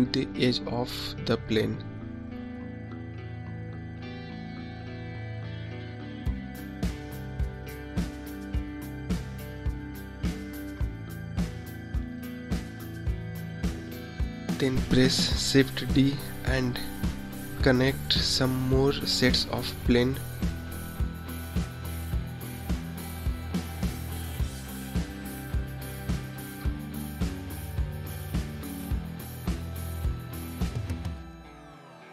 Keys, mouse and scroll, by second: 6.7 KP_0, 8.2-9.1 scroll up 7, 9.1-10.1 scroll down 9, 10.7 KP_1, 11.6 scroll up 1, 11.7-12.3 scroll down 6, 13.9 shift+d, 15.1 ctrl+click, 16.1-16.7 scroll down 1, 16.8 shift+d, 17.2 ctrl+click, 17.8-18.1 scroll down 2, 18.1 shift+d, 18.5 ctrl+click, 19.7-20.2 scroll up 1, 20.2 ctrl+click, 21.0-21.4 scroll down 3, 21.4 shift+d, 21.7 click, 22.5 shift+d, 22.8 click, 23.8 scroll down 2, 24.1 shift+d, 24.4 click, 25.3 shift+d, 25.7 click, 26.8 shift+d, 27.1 click, 27.8 KP_0, 28.1 scroll up 6, 28.5 scroll down 6, 29.1 KP_1, 29.2 scroll down 4, 29.5 shift+d, 29.9 click, 30.4 shift+d, 30.7 click, 31.3 shift+d, 31.5 click, 32.0 scroll up 3.